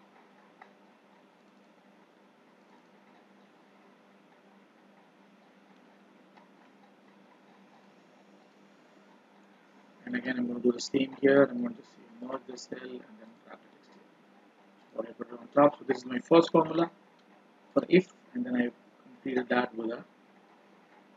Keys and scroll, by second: 16.3 ctrl+b.